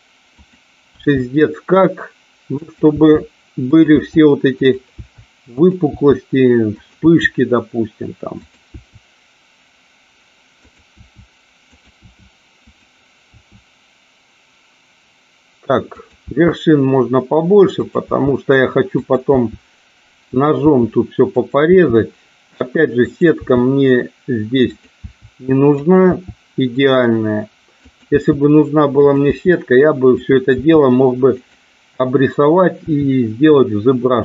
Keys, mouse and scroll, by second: 0.4 click, 1.0 e, 2.6 click, 2.9 e, 3.9 e, 4.5 click, 5.0 e, 5.5 click, 5.8 e, 6.6 click, 6.9 e, 8.3 click, 8.8 e, 10.7 click, 10.9 e, 11.7 click, 12.0 e, 12.7 click, 13.3 e, 15.9 click, 16.1 e, 17.9 e, 19.0 click, 19.3 e, 20.1 click, 20.6 e, 21.4 click, 21.6 e, 23.0 click, 23.3 e, 24.6 click, 24.9 e, 25.8 click, 26.0 e, 27.8 click, 28.0 e, 29.0 click, 29.3 e, 30.1 click, 30.5 e, 31.4 click, 32.8 e.